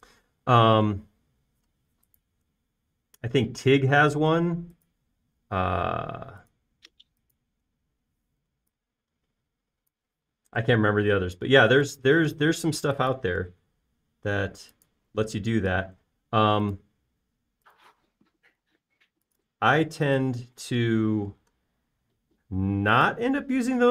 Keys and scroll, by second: 1.8 space, 9.7 f, 11.1 typing, 11.6 Return, 12.5 space, 13.4 m, 16.8 l, 22.0-22.5 typing.